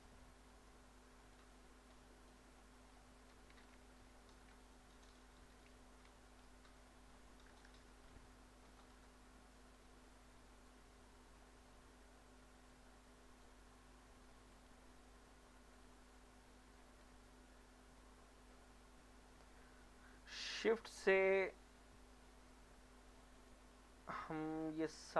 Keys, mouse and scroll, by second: 0.5-1.1 scroll up 1, 1.4 click, 2.6 middle click, 3.0 shift+middle click, 4.0 ctrl+r, 4.6 click, 5.0 right click, 6.1 s, 6.7 x, 8.8 click, 10.0 middle click, 12.7-14.5 drag, 16.1-17.3 drag, 17.7 middle click, 18.2 Tab, 21.1 shift+click.